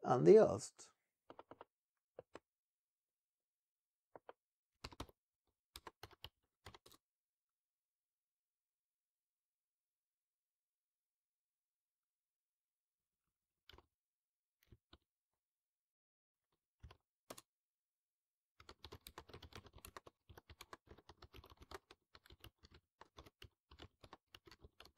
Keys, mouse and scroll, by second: 1.3 click, 2.2 right click, 4.2 click, 4.9 ctrl+x, 5.1 ctrl+e, 5.3-6.8 typing, 6.9 Return, 12.5 Down, 12.8 Right, 13.5-14.4 typing, 15.0 ctrl+shift+v, 16.3-24.9 typing.